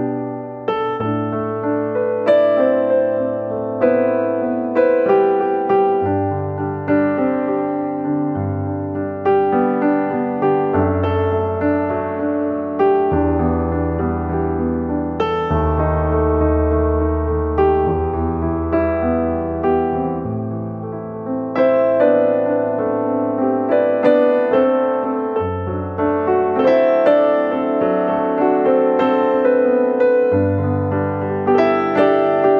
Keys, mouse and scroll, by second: 0.2 r, 1.2 g, 2.7 r, 3.9 s, 5.7 Tab, 5.9-6.3 scroll down 4, 6.1 click, 6.4 middle click, 8.0-8.3 scroll up 7, 8.5 ctrl+z, 8.6 ctrl+z, 8.7 ctrl+z, 8.9 ctrl+z, 9.0 ctrl+z, 9.9 click, 10.7 r, 11.4 c, 11.9 r, 12.4 g, 14.2 s, 16.2 click, 16.8 ctrl+z, 17.1 g, 18.2 g, 19.7 r, 20.9 Tab, 20.9 `, 21.4 middle click, 21.6-22.2 scroll down 7, 22.0 middle click, 22.6 right click, 23.1 middle click, 23.4-23.8 ctrl+z, 23.9 ctrl+z, 24.1 ctrl+z, 24.2 ctrl+z, 24.5 ctrl+z, 25.2 click, 25.6 Tab, 25.9 scroll up 4, 26.8 Tab, 27.4 g, 28.5 r, 29.5 middle click, 29.9 Tab, 30.7 s, 31.6 Tab, 32.2 middle click.